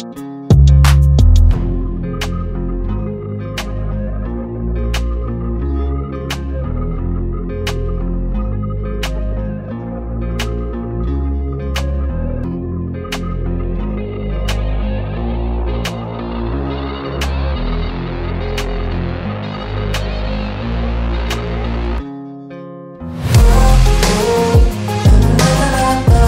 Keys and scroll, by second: 0.9 Return.